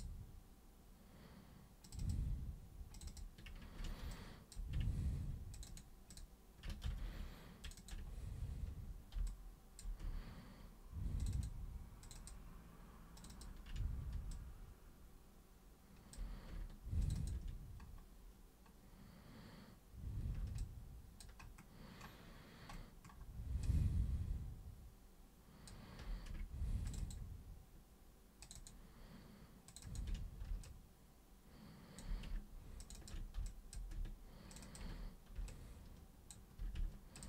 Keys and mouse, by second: 1.8 shift+super+click, 2.1 shift+super+click, 2.9 shift+super+click, 3.1 shift+super+click, 4.1 alt+super+click, 5.6 ctrl+shift+super+click, 6.1 ctrl+shift+super+click, 6.8 ctrl+super+z, 7.6 ctrl+shift+super+click, 9.3 alt+super+click, 11.2 ctrl+shift+super+click, 12.0 ctrl+shift+super+click, 13.2 ctrl+shift+super+click, 13.3 ctrl+shift+super+click, 14.3-16.1 alt+super+drag, 17.0 ctrl+shift+super+click, 20.6 alt+super+click, 23.6-25.6 alt+super+drag, 26.9 ctrl+shift+super+click, 28.4 ctrl+shift+super+click, 29.7 ctrl+shift+super+click, 30.6-32.0 alt+super+drag, 32.8 ctrl+shift+super+click, 33.5 alt+super+click, 34.5 ctrl+shift+super+click, 35.5 alt+super+click, 37.2 ctrl+shift+super+click.